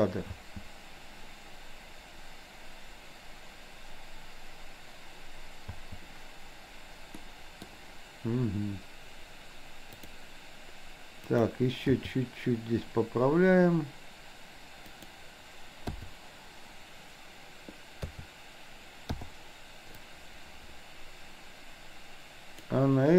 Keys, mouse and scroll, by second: 0.4 space, 5.8 space, 7.4-7.9 middle drag, 10.1 click, 11.4 click, 12.0 g, 15.9 i, 18.1 a, 19.1 i, 20.1-22.8 drag.